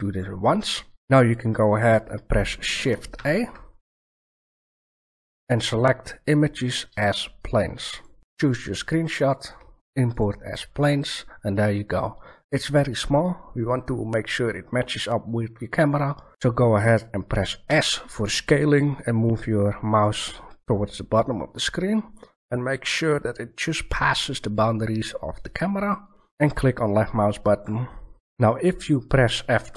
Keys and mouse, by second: 3.1 shift+a, 17.6 s, 27.7 middle click.